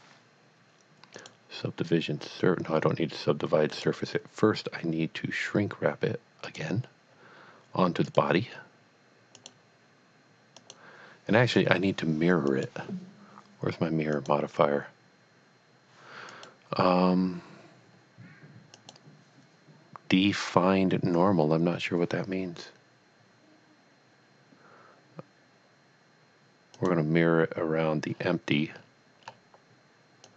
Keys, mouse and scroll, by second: 1.2 click, 3.7 click, 6.5 click, 9.2 click, 9.4 click, 11.9 click, 12.5 click, 14.1 click, 16.3 click, 18.8 click, 26.7 click, 28.3-29.2 scroll down 2, 30.2 click.